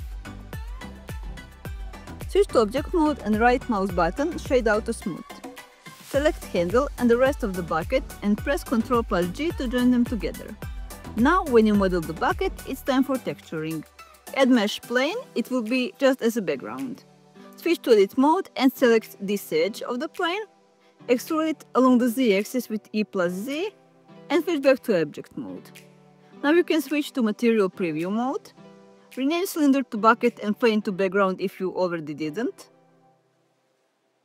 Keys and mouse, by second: 0.0 f, 3.4 Tab, 5.4 right click, 7.0 click, 10.8 ctrl+j, 12.9-15.8 drag, 18.0 Tab, 19.2 2, 19.6 click, 20.5 e, 20.8 z, 21.7 click, 22.0 middle click, 26.4 Tab.